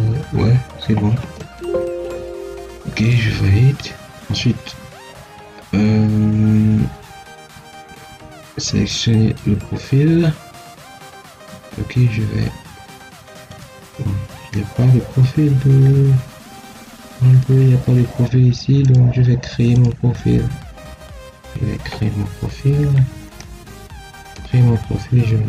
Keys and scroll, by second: 1.7 Escape.